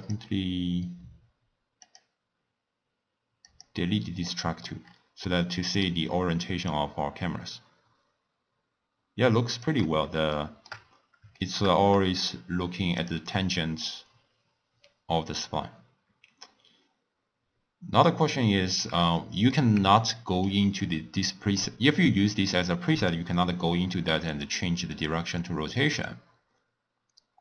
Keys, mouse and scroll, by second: 0.0 click, 1.8 click, 3.4 click, 4.3 middle click, 4.8-5.2 scroll up 4, 5.2 scroll down 1, 5.2-6.7 middle drag, 6.7-9.7 shift+drag, 10.3-10.8 shift+middle drag, 10.8-11.4 scroll down 2, 11.4-12.9 shift+middle drag, 12.9 click, 13.8 click, 15.2-18.3 drag, 19.2-20.8 middle drag, 20.8 click, 22.3-23.4 drag, 23.4-24.9 middle drag, 24.9 click.